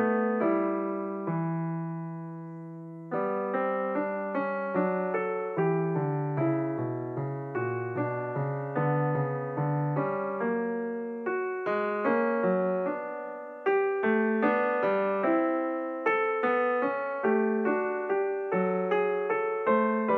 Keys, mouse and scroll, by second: 1.5 s, 5.2 Tab, 5.9 click, 6.1 Tab, 8.0 click, 9.8 ctrl+r, 11.3 click, 13.4 ctrl+r, 15.5 click, 17.0 ctrl+r, 19.3 click.